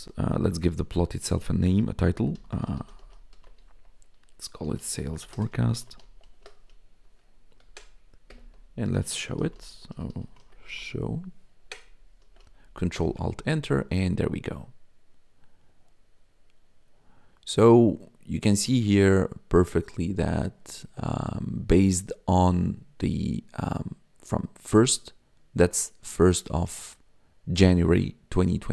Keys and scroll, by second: 0.0-0.4 typing, 2.0-6.9 typing, 7.4 Right, 8.2 Return, 9.1-11.1 typing, 11.5 Right, 12.2 ctrl+s, 12.9 ctrl+alt+Return.